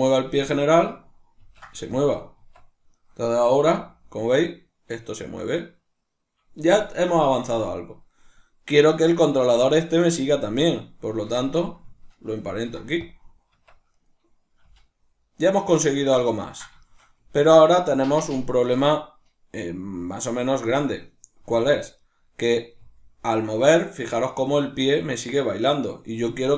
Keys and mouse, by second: 0.6 shift+right click, 1.4 ctrl+p, 3.0 right click, 3.8 g, 6.7 right click, 9.2 right click, 11.1 shift+right click, 11.4 Tab, 14.0 right click, 14.6 g, 16.1 right click, 16.3-20.3 ctrl+middle drag, 17.2 g, 20.3 right click, 21.4 g, 22.1 right click, 22.8 g, 26.3 right click.